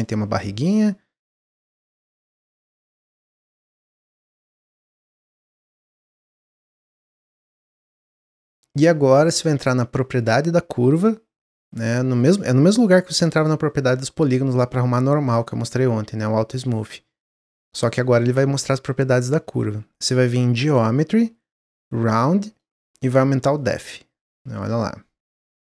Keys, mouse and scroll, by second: 2.1-3.8 drag, 4.5 click, 5.0 click, 6.1-9.1 middle drag, 19.6 scroll up 1, 22.7 scroll up 3, 23.0-25.5 drag.